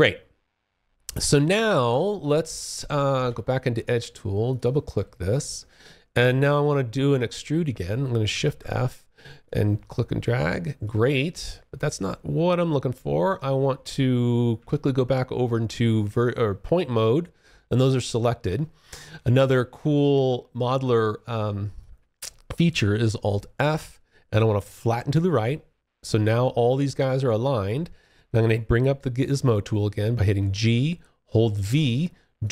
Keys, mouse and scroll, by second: 3.6 click, 3.8 double click, 4.4 alt+click, 6.4 alt+click, 7.6 shift+f, 8.6 click, 10.4 alt+click, 18.5 alt+click, 19.3 alt+middle click, 19.9 alt+click, 23.0-24.4 alt+f, 29.7 g, 30.8-32.5 v.